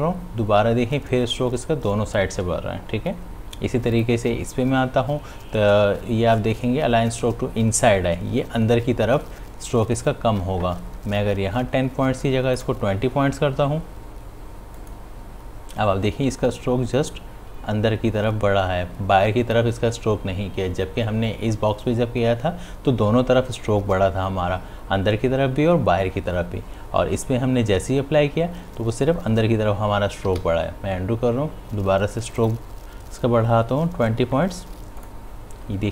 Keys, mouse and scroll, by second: 1.1 ctrl+shift+z, 5.8 click, 14.0 click, 15.4 click, 30.9 ctrl+z, 32.6 click.